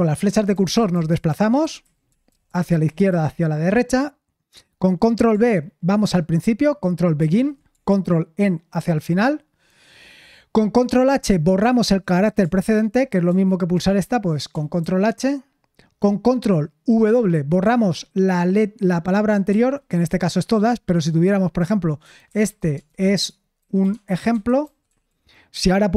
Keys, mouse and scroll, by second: 0.5 Left, 0.7 Left, 0.9 Left, 1.6 Left, 2.0 Right, 2.2 Right, 2.4 Right, 2.6 Right, 2.8 Left, 3.0 Left, 3.2 Left, 7.1 ctrl+b, 8.7 ctrl+e, 14.8 ctrl+h, 19.4 ctrl+w, 22.4-25.5 typing.